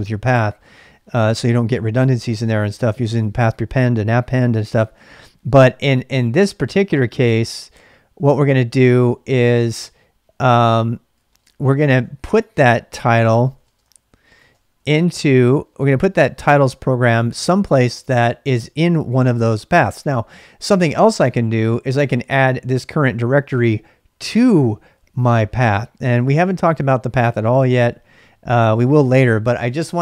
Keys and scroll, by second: 9.0-9.8 typing, 10.9-15.3 typing, 21.8-22.7 typing.